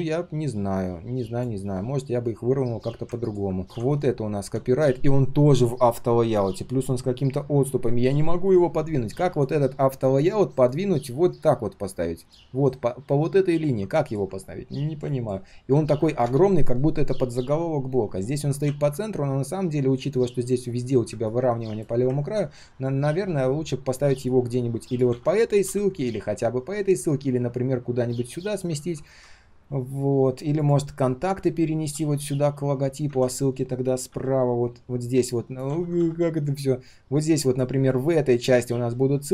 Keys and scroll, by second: 25.1 ctrl+z, 28.8 ctrl+z, 33.1 ctrl+z, 35.7 ctrl+z.